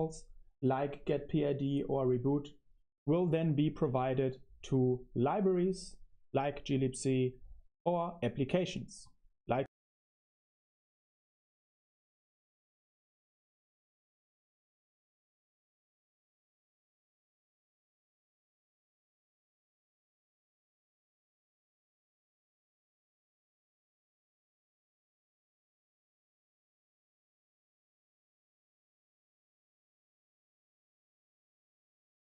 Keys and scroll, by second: 10.2 super+3, 11.6-22.8 typing, 13.2 Return, 23.1 Escape, 23.9-26.6 typing, 32.1 super+3.